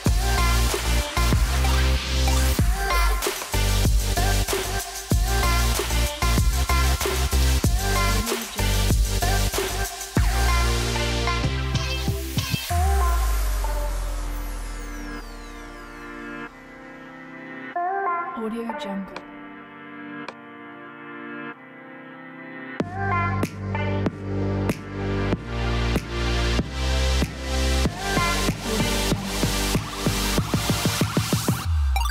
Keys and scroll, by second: 4.2 0, 10.2 0, 14.4 0, 18.6 space.